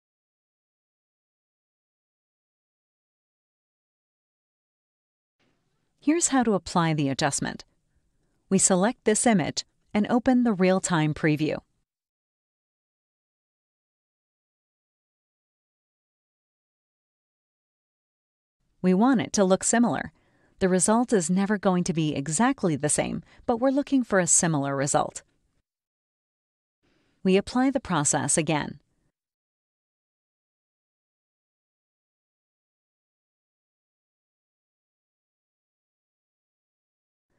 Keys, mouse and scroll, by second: 0.1-1.7 drag, 2.5-4.4 drag, 5.4-6.6 drag, 7.1 scroll up 2, 9.0 click, 13.0 click, 14.6-16.8 drag, 18.4 click, 19.6 click, 23.4 click, 24.2 click, 25.3 click, 26.1 click, 29.0 click, 31.7-33.3 drag, 35.3 click, 36.7 scroll down 2.